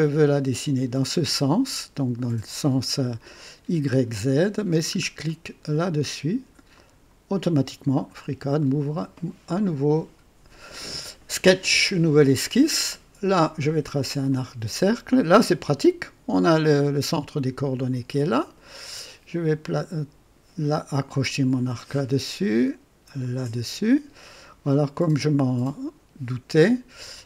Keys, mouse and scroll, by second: 4.9 scroll up 2, 6.6 click, 8.0-8.4 scroll up 2, 8.5-9.4 right drag, 14.2 click, 17.8 click, 21.2 click, 23.1 click, 24.2 right click, 26.4 right click.